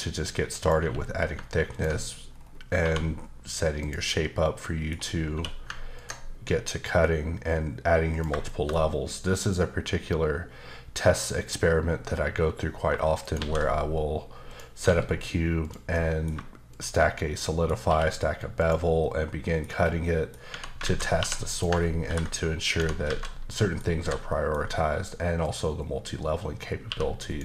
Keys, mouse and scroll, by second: 0.5 click, 0.8 q, 1.7 ctrl+click, 2.3-2.8 scroll down 2, 2.8 1, 3.8 click, 4.4 middle click, 5.3 q, 5.9 ctrl+click, 8.4 shift+middle click, 8.7-10.6 scroll up 2, 13.2 shift+right click, 13.4 shift+a, 14.5 click, 14.8 s, 15.6 click, 15.9 middle click, 16.7 shift+click, 17.3 middle click, 17.9 q, 18.6 click, 19.0 middle click, 20.0 middle click, 20.5 Tab, 20.8 alt+z, 21.5 click, 22.0 ctrl+b, 22.7 click, 23.5 middle click, 24.0 typing, 24.3 middle click, 24.5-25.4 scroll up 2, 25.4 click, 26.8 q, 27.3 click.